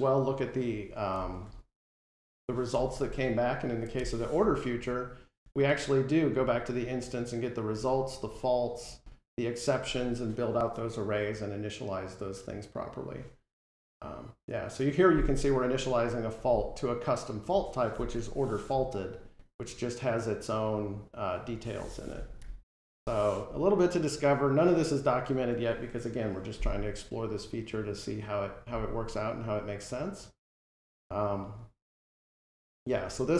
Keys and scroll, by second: 2.9 alt+End, 18.1 F12, 22.3 super+-.